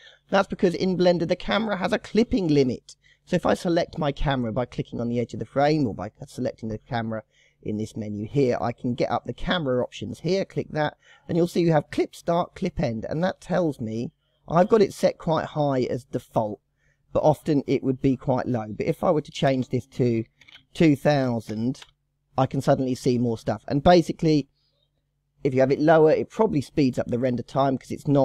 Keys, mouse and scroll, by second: 0.0 shift+middle click, 0.4-1.7 scroll down 4, 1.7-2.6 scroll up 1, 2.6-3.6 scroll down 1, 3.6 click, 4.4 click, 6.3 click, 10.3 click, 12.9-15.9 drag, 17.2-20.4 drag, 20.6 KP_0.